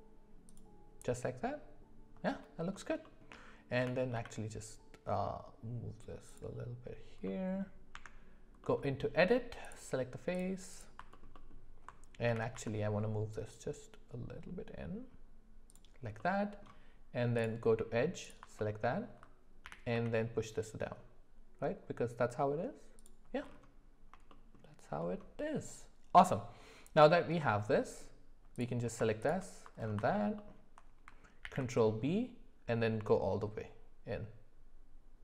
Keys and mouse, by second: 3.0 shift+middle click, 3.8 g, 7.3 middle click, 7.9 Tab, 8.6 middle click, 11.1 alt+middle click, 11.3 alt+middle click, 12.3 g, 16.2 middle click, 18.2 click, 18.8 alt+middle click, 19.7 g, 24.3 shift+middle click, 27.4 middle click, 29.2 shift+click, 30.1 alt+middle click, 30.4 alt+middle click, 31.4 ctrl+b.